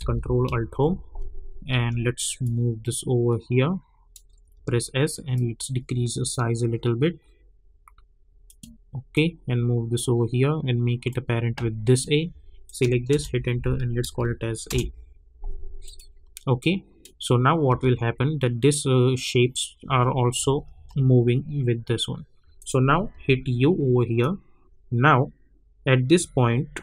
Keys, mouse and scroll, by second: 0.7 ctrl+alt+Home, 1.7 v, 2.4-4.5 drag, 4.5 s, 5.3-12.6 drag, 13.1 Return, 14.0 a, 14.7 Return, 15.8 click, 17.3-17.7 scroll down 1, 17.7 space, 20.1 space, 22.5 click, 23.1 u, 24.2-26.8 drag.